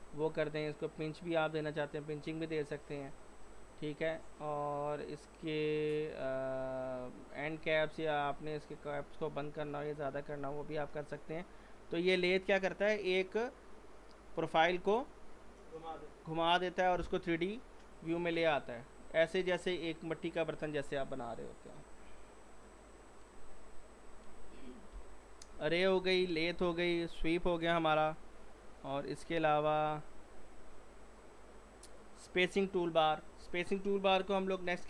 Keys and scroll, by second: 24.9 Delete, 34.6 z.